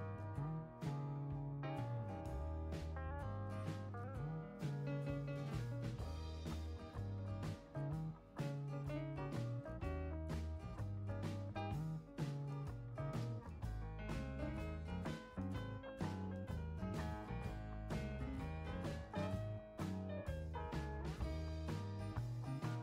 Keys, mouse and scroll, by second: 1.0 right click, 1.5 right click, 2.4 scroll up 1, 3.9 click, 5.2 scroll up 1, 6.1 click, 6.6 click, 7.9 click, 8.4 click, 9.5 click, 10.3 click, 10.7 right click, 13.6 click, 14.7 ctrl+click, 18.6 click, 22.2 1.